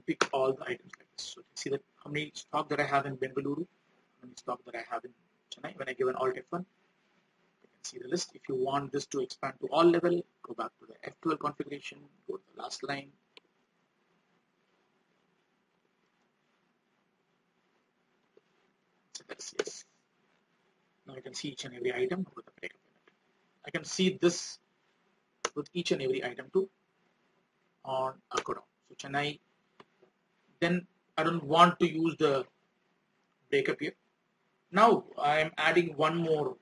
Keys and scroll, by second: 6.4 alt+F1, 13.5 ctrl+Page_Down, 26.4 alt+F1.